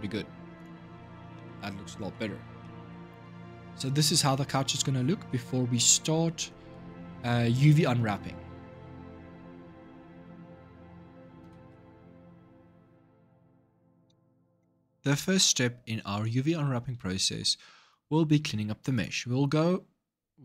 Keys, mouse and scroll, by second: 0.3 click, 0.9-1.2 scroll down 1, 1.2-1.9 middle drag, 1.9-2.4 scroll down 3, 2.4-3.1 shift+middle drag, 3.1-3.4 scroll down 4, 3.4-6.7 shift+middle drag, 6.7 scroll up 2, 7.5-10.5 shift+middle drag, 11.2 ctrl+shift+Up, 12.9 ctrl+shift+Down, 14.0 ctrl+shift+Up, 18.7 click.